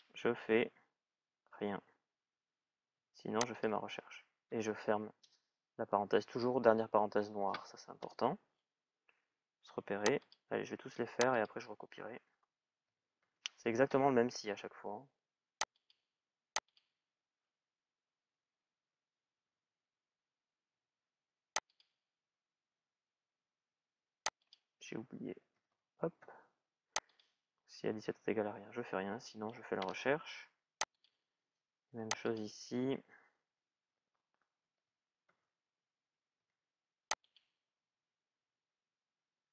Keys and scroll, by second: 7.7 Return, 12.5 shift+s, 12.8 shift+i, 29.5 Return, 34.4 shift+s.